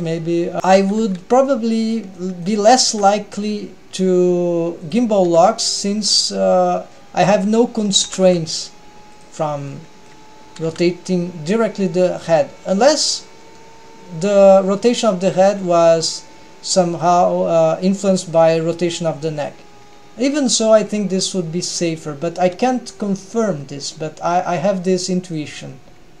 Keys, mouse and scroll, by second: 0.0 r, 0.6 r, 1.2 g, 2.3-2.7 middle drag, 3.0 r, 5.3 r, 9.8 middle click, 9.8 r, 10.8 r, 12.1 middle click, 15.7-16.9 scroll up 2, 18.5 click, 19.6 click, 20.0-22.6 scroll down 1, 22.6 scroll down 1, 24.6-25.0 scroll down 1, 25.0 middle click, 25.7-26.2 scroll down 1.